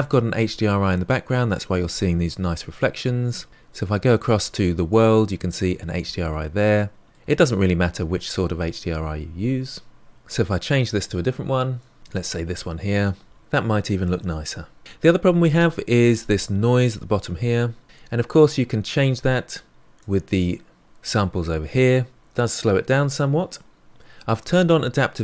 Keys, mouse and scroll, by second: 10.1 ctrl+z, 10.3-12.0 drag, 19.6-20.9 drag, 23.2-25.2 drag.